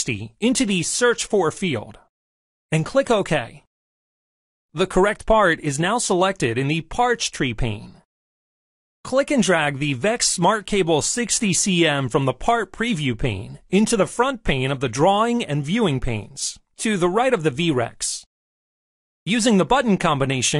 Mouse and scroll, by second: 4.5 click, 8.3-12.9 drag.